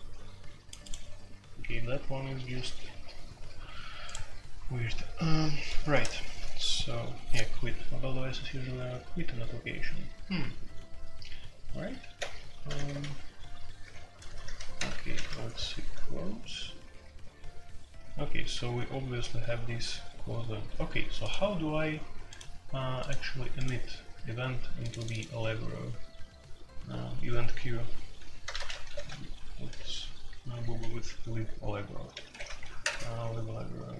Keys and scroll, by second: 5.9 ctrl+g, 12.1 F3, 12.6 F3, 12.8 F3, 13.0 F3, 14.4 ctrl+g, 14.7-15.4 typing, 15.9 F3, 16.9 F3, 17.8 F3, 18.1 F3, 18.5 F3, 28.1-29.6 typing, 32.2-32.8 typing.